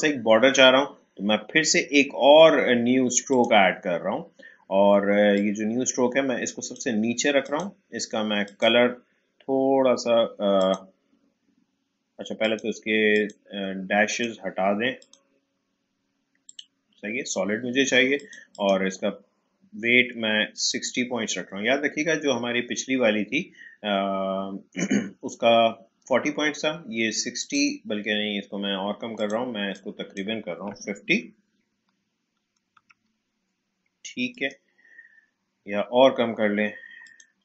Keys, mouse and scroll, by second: 3.3-7.4 drag, 27.4-32.7 drag, 32.4-33.4 typing, 34.3 click, 37.0-37.4 drag.